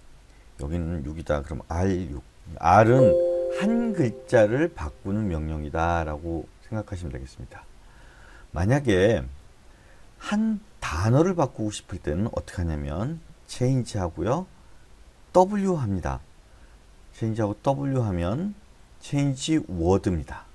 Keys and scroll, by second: 0.0-2.6 typing, 2.7 Escape, 12.9 k, 13.7 c, 15.4 w.